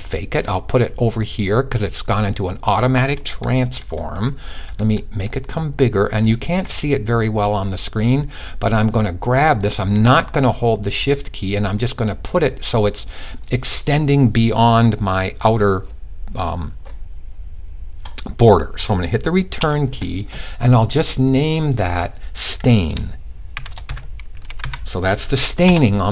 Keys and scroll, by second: 23.1-24.1 typing.